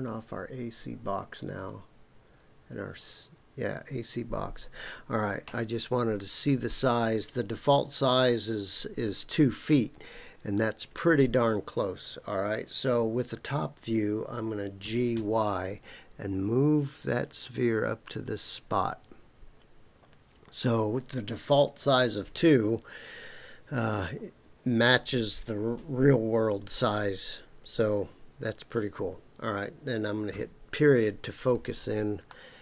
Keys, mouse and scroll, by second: 0.7-1.5 scroll down 1, 1.5 click, 14.8 g, 15.1 y, 20.6 click, 30.3 KP_Decimal, 31.5 scroll down 3, 32.2-32.6 middle drag.